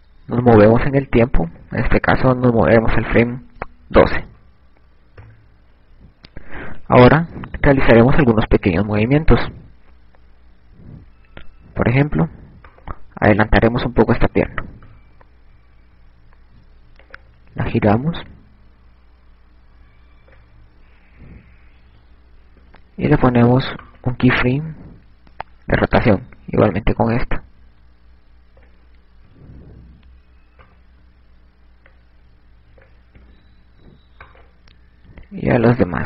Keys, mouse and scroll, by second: 0.0-0.8 shift+scroll up 1, 0.8 ctrl+scroll down 1, 1.3-3.3 ctrl+scroll up 1, 3.3 click, 7.7 KP_6, 13.1 right click, 16.3 KP_1, 18.5 click, 19.5 click, 23.4 i, 24.0 right click, 27.6 click, 30.6 i, 32.2 right click, 33.4 click, 34.6 i.